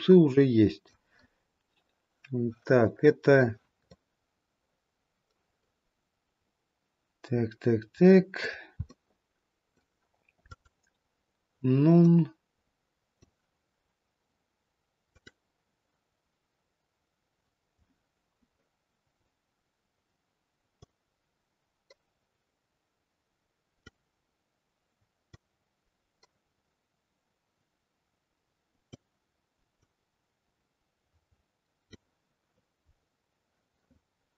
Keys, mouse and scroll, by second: 3.9 middle click, 9.1 middle click, 10.6 click, 12.1 middle click, 15.0 click, 17.4-17.8 scroll down 2, 18.2-20.8 scroll down 1, 20.8 click, 25.3 click, 29.8 click, 32.6-34.3 scroll down 5.